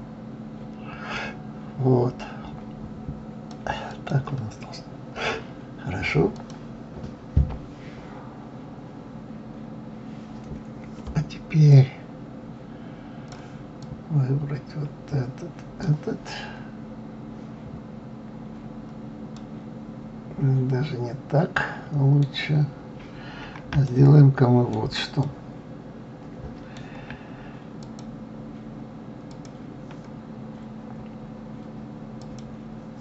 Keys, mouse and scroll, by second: 4.3 click, 5.2-6.7 scroll down 4, 6.7 click, 12.1-17.2 drag, 19.7-22.8 middle drag, 23.1-23.5 scroll up 2, 24.3-28.2 shift+middle drag, 28.2 click, 29.7 click, 30.8-32.6 scroll up 2, 32.6 click.